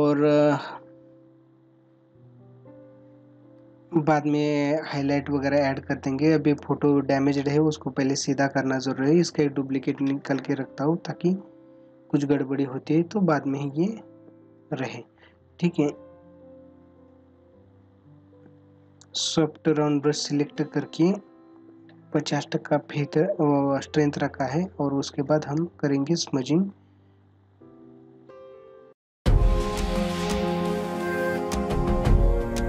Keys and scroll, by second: 2.9 ctrl+-, 4.6 space, 6.6 space, 23.2 ctrl+-, 24.4 space, 26.1 ctrl+-.